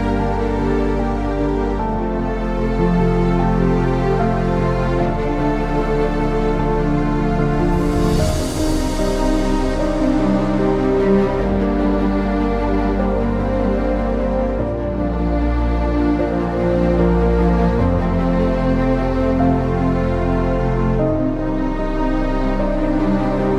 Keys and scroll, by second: 0.8-8.8 typing, 10.8-23.5 typing.